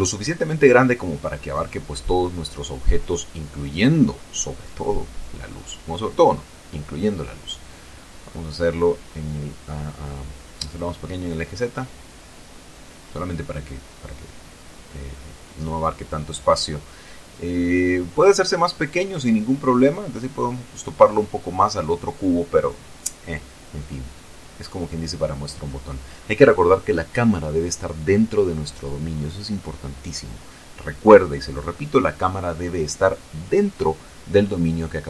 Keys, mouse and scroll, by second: 1.4 click, 1.6 scroll down 2, 2.0-3.7 drag, 3.7-4.9 middle drag, 4.6-5.4 typing, 6.1 click, 7.4-8.4 typing, 11.0-14.3 drag, 11.3-14.3 middle drag, 14.4 z, 14.8-16.1 middle drag, 16.6 middle click, 16.8-17.1 scroll up 2, 17.8 shift+click, 21.3 click, 22.0 shift+click, 23.0-23.9 shift+scroll up 5, 24.2 scroll down 2, 29.9 right click, 32.1 right click.